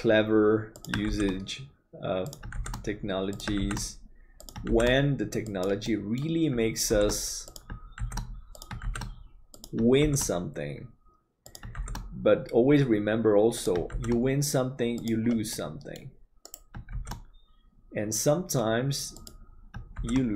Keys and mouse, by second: 5.8 middle click, 15.4 middle click.